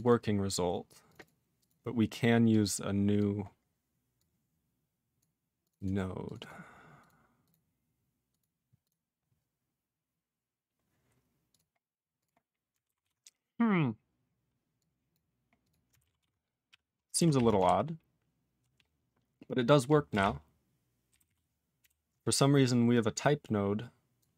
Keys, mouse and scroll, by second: 0.0 double click, 0.0 double click, 1.0 click, 1.1 click, 1.1 double click, 1.2 double click, 1.5 click, 1.6 click, 2.4 click, 3.1 click, 3.4-4.1 scroll down 3, 4.1 click, 5.2 click, 5.6 click, 5.6 click, 5.7 double click, 5.8 double click, 6.2 click, 6.3 click, 6.3 double click, 6.4 double click, 7.0 click, 7.1 click, 7.4 click, 7.4 click, 8.2 click, 8.3 click, 8.8 click, 8.8 click, 11.4 click, 11.5 click, 11.7-12.1 scroll down 2, 12.2 click, 12.3-13.0 scroll down 3, 13.0 ctrl+s, 13.2-13.8 scroll down 3, 13.9-14.7 scroll down 2, 14.7 click, 15.1 click, 15.6 click, 15.6 click, 16.1 ctrl+s.